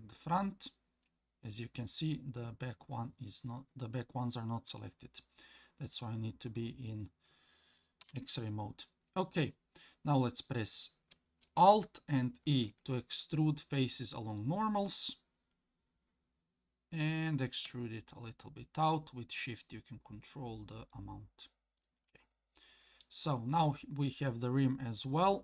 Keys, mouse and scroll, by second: 1.0-4.7 middle drag, 5.8 click, 8.0 KP_1, 12.5 alt+e, 22.6 middle click, 23.6-24.6 scroll down 1.